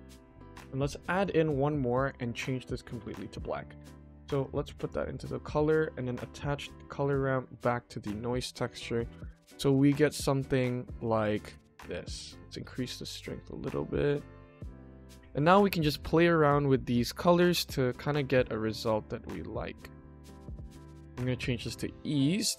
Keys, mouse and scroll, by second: 1.1 click, 1.8 drag, 2.3 click, 3.3 click, 4.4-4.8 drag, 6.4-7.4 drag, 8.7-9.2 middle drag, 9.8-10.3 middle drag, 10.7 scroll up 1, 11.5 shift+middle click, 12.3-14.7 drag, 15.8-17.5 drag, 18.1-19.8 drag, 20.9-21.7 drag.